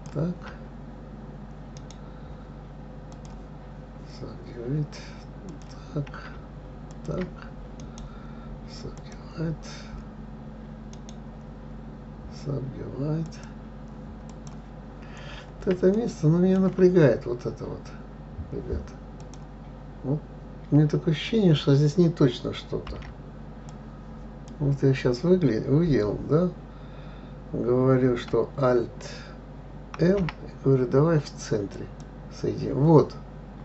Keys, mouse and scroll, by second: 0.3 shift+click, 3.6-5.9 right drag, 5.9 click, 7.3 shift+click, 8.2-14.3 right drag, 14.7 click, 15.3-15.9 scroll up 3, 16.3-19.3 shift+middle drag, 19.6 click, 23.3 b, 30.4 alt+m.